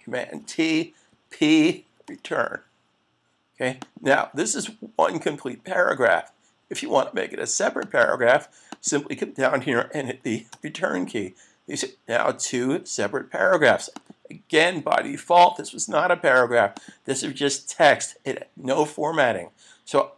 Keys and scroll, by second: 2.1 Return, 10.5 Return, 15.1 super+s.